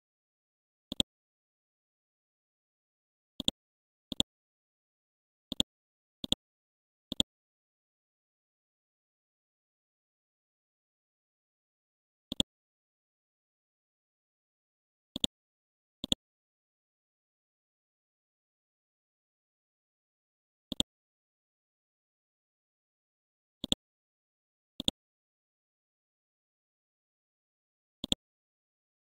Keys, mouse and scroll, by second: 1.8 KP_4, 2.0 KP_0, 2.2 Tab, 3.4-5.3 drag, 6.2 right click, 7.1 click, 7.4 ctrl+a, 8.0-9.2 typing, 10.9 ctrl+a, 12.3 click, 13.3 KP_1, 13.5 KP_5, 15.1 click, 16.6-18.8 typing, 19.4 Return, 20.7 click, 21.6-22.5 typing, 23.4 scroll up 1, 23.7 click, 24.1 scroll down 1, 24.8-27.5 drag, 27.5 scroll down 1, 28.0 click, 28.4 scroll up 1.